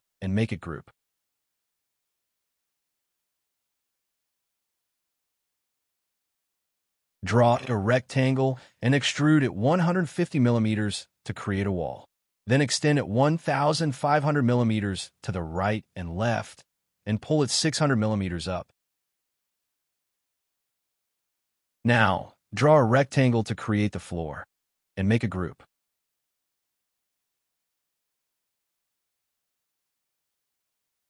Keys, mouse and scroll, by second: 0.5 g, 3.8 scroll down 1, 3.9 middle click, 5.2 scroll up 1, 5.9 r, 7.8 scroll up 1, 9.9 scroll down 1, 11.0-11.8 typing, 11.7 scroll down 1, 12.1 middle click, 13.2-14.1 typing, 14.2 scroll down 1, 14.4 middle click, 14.7 scroll up 1, 15.4 double click, 15.6 scroll down 1, 16.3 middle click, 17.5 scroll up 1, 19.3 6, 19.6 Return, 19.6 0, 19.7 scroll down 1, 20.0 space, 20.2 double click, 20.8 g, 21.1 middle click, 21.3 scroll down 1, 22.7 r, 26.8 space, 28.1 m, 29.2 space, 29.7 double click, 29.8 g, 29.9 double click, 30.2 scroll up 1, 30.4 shift+middle click, 31.0 scroll up 1.